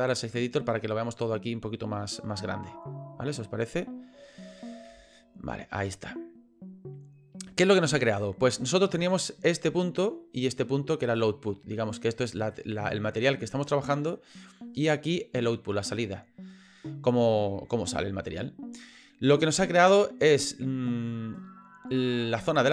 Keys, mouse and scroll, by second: 4.9 n.